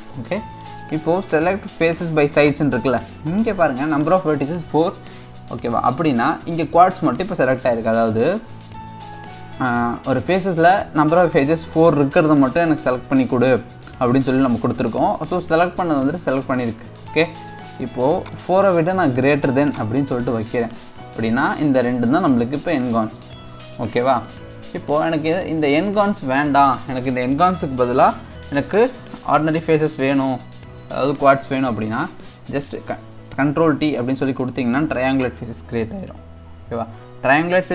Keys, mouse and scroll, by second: 0.1-2.4 middle drag, 2.4-5.6 drag, 15.2-18.2 middle drag, 18.2-20.5 drag, 20.5-24.2 middle drag, 24.2 scroll down 2, 24.4-27.5 middle drag, 28.2-29.0 scroll up 2, 29.0-32.2 middle drag, 33.7 ctrl+t, 35.2 click, 35.7-36.2 scroll up 1, 36.2-37.7 scroll up 2.